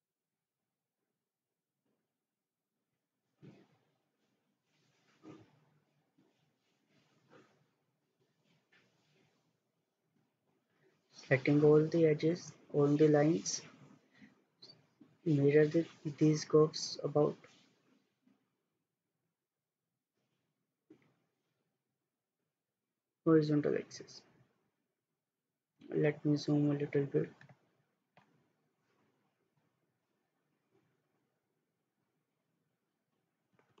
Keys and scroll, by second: 29.7 Escape.